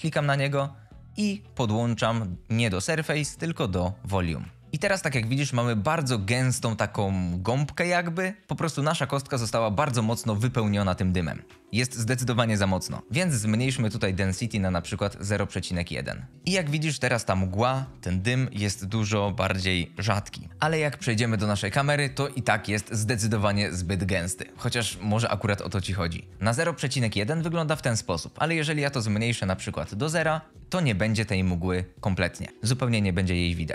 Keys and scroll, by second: 13.9 KP_0, 14.0 KP_1, 15.1 Return, 21.2 KP_0, 29.6 KP_0, 30.0 Return.